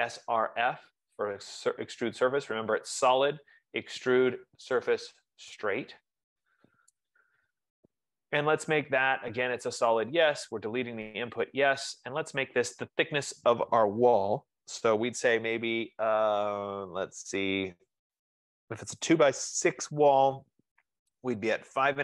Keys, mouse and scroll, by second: 0.0-1.0 typing, 7.3 Return.